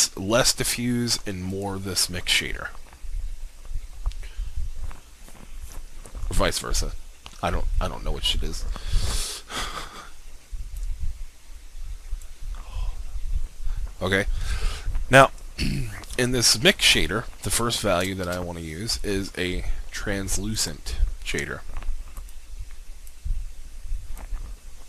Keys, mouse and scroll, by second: 1.5-12.3 drag, 18.3 shift+a, 20.6 click.